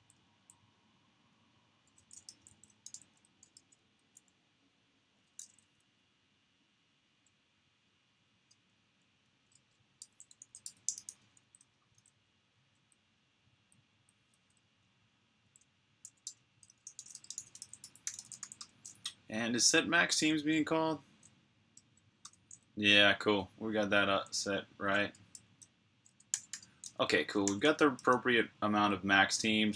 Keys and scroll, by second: 0.0-0.7 typing, 2.1 shift+super+f, 2.3-3.9 typing, 5.2 g, 9.3-13.7 typing, 15.9-18.7 typing, 16.8 shift+super+f, 20.0 j, 21.5 k, 22.0 Return, 26.2-27.9 typing.